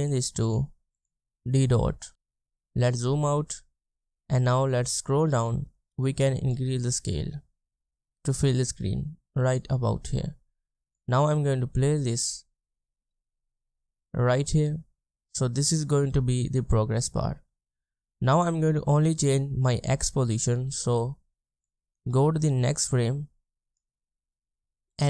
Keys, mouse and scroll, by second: 0.1 double click, 2.4-3.0 ctrl+scroll down 1, 4.4-8.0 scroll down 1.